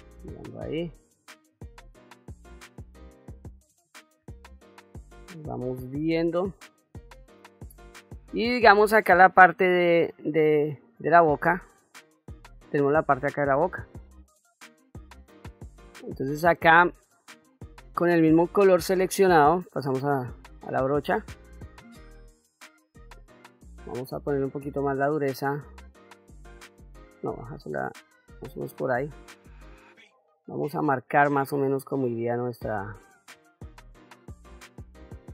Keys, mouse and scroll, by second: 0.4 click, 1.4 middle click, 4.3 shift+middle click, 5.2 shift+middle click, 5.9 middle click, 7.7 middle click, 15.9 middle click, 19.8 click, 21.0 middle click, 24.2 shift+f, 25.9-28.4 shift+f, 29.3-35.3 drag.